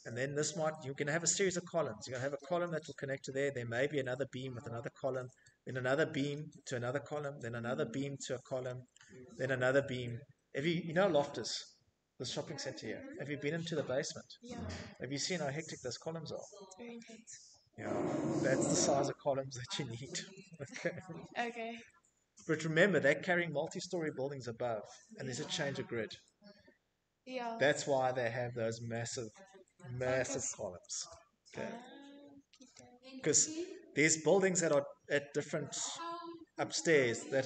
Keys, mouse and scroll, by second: 7.6 middle click, 9.0 middle click, 9.0 middle click, 9.1-10.1 scroll, 18.8-19.3 scroll, 19.1 Escape, 19.4 middle click, 20.8 middle click, 21.0 middle click, 21.1 middle click, 23.9 middle click, 30.0 Escape, 30.2 middle click, 30.3 middle click, 30.4 middle click, 31.8 middle click.